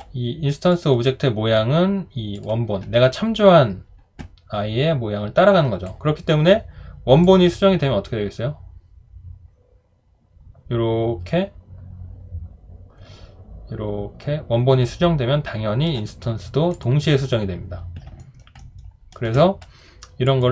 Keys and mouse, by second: 18.2 alt+right click, 18.6 alt+middle click.